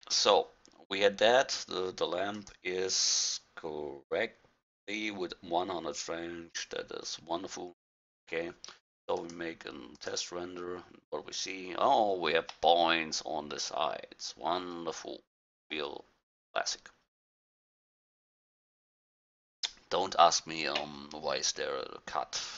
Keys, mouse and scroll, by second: 2.4-4.2 drag, 9.2-10.8 drag, 11.0 middle click, 11.8-14.8 middle drag, 11.8-12.6 scroll up 1, 20.6-22.5 middle drag.